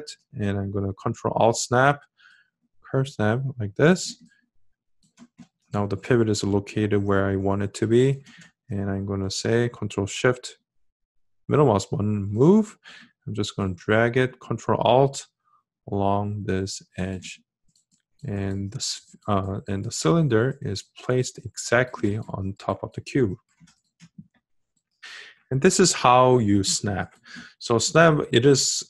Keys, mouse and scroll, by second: 0.8-6.3 ctrl+alt+drag, 9.7-12.9 ctrl+shift+middle drag, 14.1-18.3 ctrl+alt+drag.